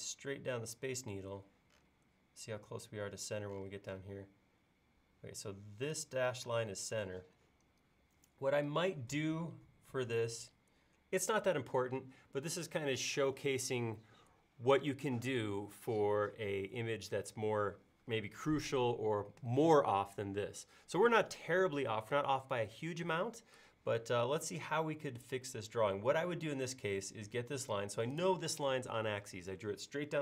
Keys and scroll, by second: 6.5 space.